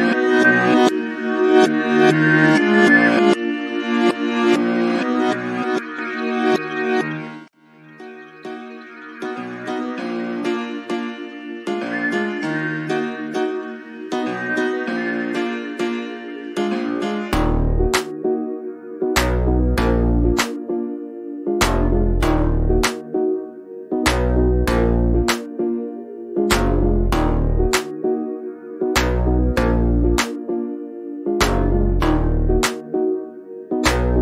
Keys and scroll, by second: 1.4 c, 2.4 space, 2.7 n, 16.1 shift+=, 17.3 2, 18.8 space, 22.5 5, 24.8 2, 27.4 space, 28.5 7, 28.9 space, 30.7 0, 30.9 0.